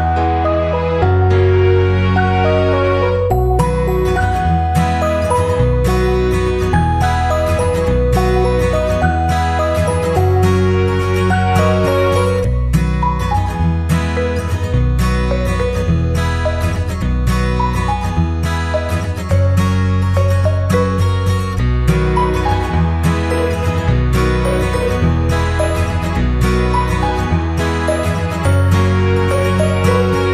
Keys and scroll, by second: 22.1 ctrl+c, 22.3 ctrl+v.